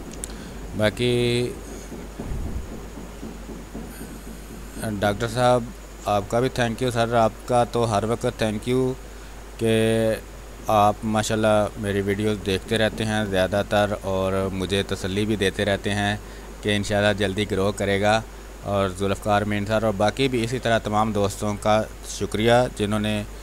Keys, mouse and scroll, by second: 0.7 space, 0.9 click, 1.2 space, 2.0-5.6 drag, 5.7 space, 6.0 click, 6.1 space, 7.3-11.3 drag, 11.3 space, 11.4 click, 11.7 space, 12.3-13.6 drag, 13.6 space, 13.9 click, 14.2 space, 14.9-19.3 drag, 22.8 r, 23.1 click.